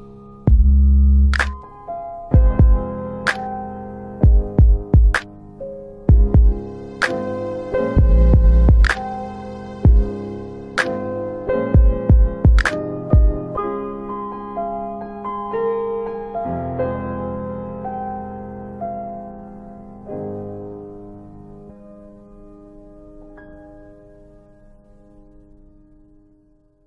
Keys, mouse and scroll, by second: 1.8-2.2 scroll down 1, 4.0 click, 12.6 click, 22.5 double click.